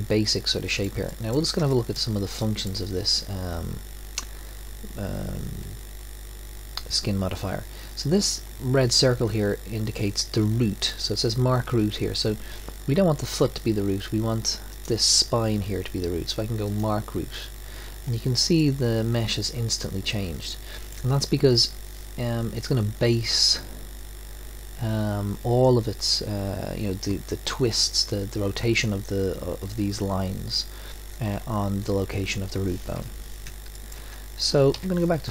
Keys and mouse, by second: 1.1-4.8 middle drag, 14.7-18.6 drag, 18.6-20.9 middle drag, 33.0 KP_1, 34.7 KP_1.